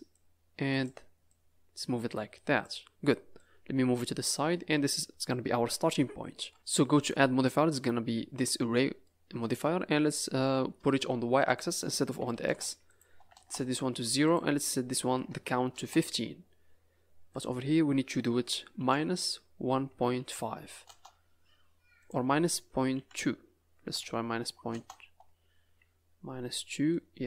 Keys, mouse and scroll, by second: 0.1 click, 1.2 click, 3.3 click, 4.5 middle click, 5.8 KP_Decimal, 6.3 z, 6.5 scroll down 4, 6.9 click, 9.0 middle click, 11.4 click, 12.8 click, 14.2 click, 17.3 click, 21.9 click, 25.6 scroll down 3, 26.0 scroll up 3, 26.5 middle click.